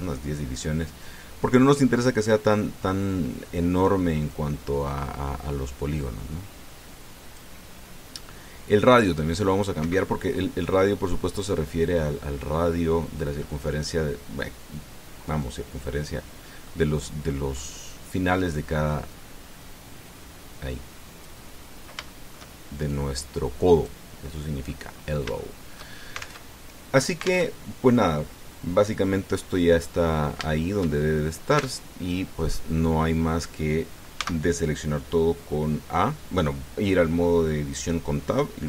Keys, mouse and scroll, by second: 0.3 KP_1, 0.4 KP_0, 0.5 KP_Enter, 5.1-8.3 drag, 9.8 click, 10.6 Escape, 11.2 middle click, 17.4 middle click, 18.3 scroll up 2, 19.9-22.2 drag, 22.4 scroll down 2, 22.9 shift+middle click, 23.7-24.8 drag, 25.0 middle click, 25.7-26.0 scroll up 1, 26.1 shift+middle click, 27.3 alt+Tab, 28.3 alt+Tab, 30.2 middle click, 31.2 shift+click, 32.4 Tab, 32.9 click, 33.7 scroll down 1, 35.0 a.